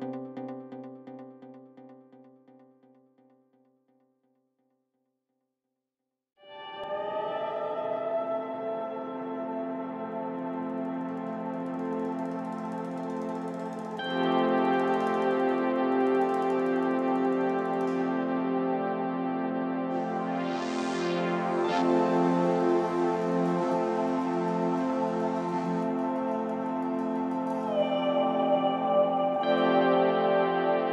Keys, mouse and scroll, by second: 1.7 scroll down 2, 1.8 middle click, 2.1 scroll up 4, 2.1 middle click, 2.7 KP_1, 3.0 scroll down 3, 3.6 click, 4.4-6.3 drag, 6.3 scroll up 1, 6.5-7.6 drag, 7.6 scroll up 2, 7.6 middle click, 8.0-10.4 drag, 10.5 middle click, 10.8-11.1 scroll down 2, 11.5 click, 12.6-13.6 middle drag, 16.5-17.9 drag, 17.9 scroll up 1, 18.0-19.0 middle drag, 19.3 scroll up 6, 19.5 middle click, 20.2-20.6 scroll down 1, 20.6 Tab, 21.3 click, 21.5 Tab, 22.0 middle click, 22.5 KP_1, 22.7 KP_3, 23.0-24.0 scroll down 1, 24.2 s, 25.2-26.2 drag, 26.3 s, 27.3 click, 27.9 s, 29.6 click, 29.7-30.4 scroll up 3, 29.8 middle click.